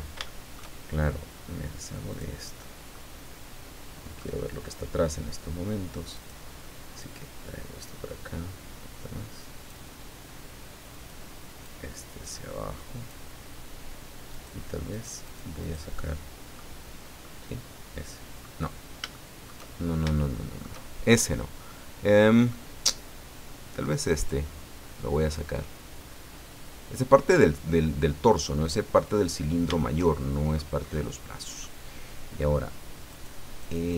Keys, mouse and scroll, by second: 0.2 shift+middle click, 2.1 click, 2.9-4.4 middle drag, 6.1 right click, 7.0-8.2 drag, 8.2-8.8 scroll down 1, 10.9 right click, 11.6-13.3 drag, 14.3 right click, 14.9 right click, 15.6 right click, 16.0 middle click, 17.2-18.6 middle drag, 19.1 shift+middle click, 19.8 shift+scroll up 2, 20.2 shift+middle click, 21.7 middle click, 24.2 right click, 25.3-26.9 drag, 26.9-27.2 scroll down 2, 29.0 middle click, 30.0 shift+middle click, 30.8 middle click, 33.1 right click, 33.6 right click.